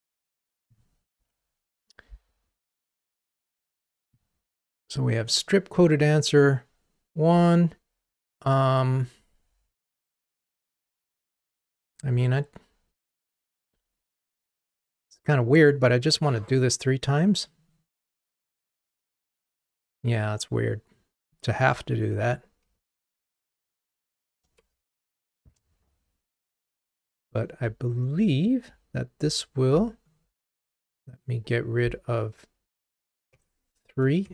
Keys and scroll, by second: 18.6 super+c, 22.9 super+v, 33.1 super+BackSpace.